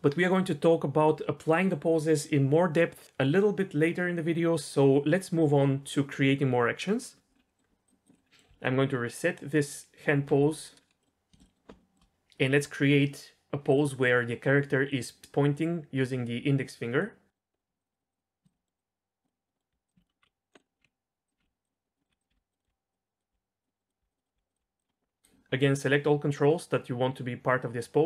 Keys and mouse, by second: 8.1 middle click, 8.3 middle click, 10.1 alt+r, 10.5 middle click, 11.0-11.6 middle drag, 11.8 shift+middle click, 14.9 middle drag, 17.0-17.7 middle drag, 17.8 shift+drag, 18.1 shift+click, 18.5-18.9 middle drag, 19.3 middle drag, 19.5 middle click, 19.7-24.8 typing, 20.0 ctrl+z, 20.0 middle drag, 20.7 middle click, 21.7 middle click, 22.2 click, 22.6 middle click, 23.2 click, 23.7 middle click, 24.9 middle click, 25.8-28.0 drag.